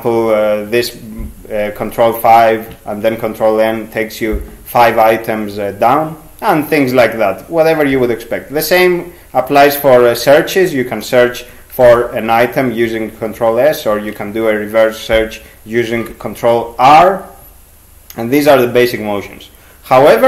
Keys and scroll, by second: 10.2 ctrl+s, 11.6-12.5 typing, 13.9 ctrl+r, 15.9 ctrl+g.